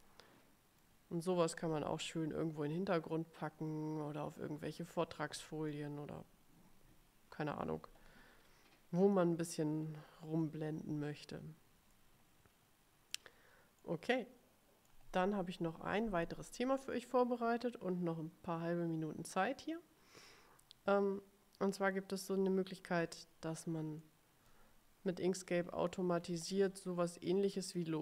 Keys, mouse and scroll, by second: 0.0 middle click, 0.2-1.2 middle drag, 1.6-6.0 drag, 12.1-13.5 middle drag, 13.9-15.2 drag, 24.1 middle click, 25.5-26.8 ctrl+scroll up 3, 27.4 click.